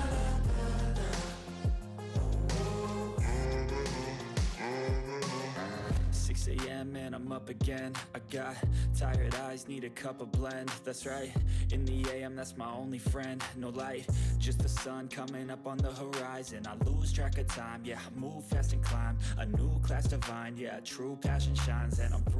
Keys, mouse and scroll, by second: 1.3-2.1 typing, 4.3-8.9 typing, 10.2-17.3 typing, 17.4 ctrl+s, 19.1 click, 20.1 shift+7, 20.4 ctrl+s, 20.9 click.